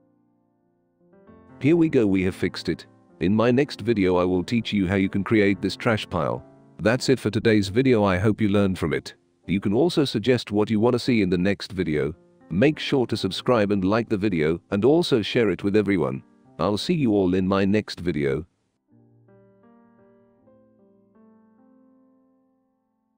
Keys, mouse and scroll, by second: 0.3 click, 0.3 right click, 20.5 click.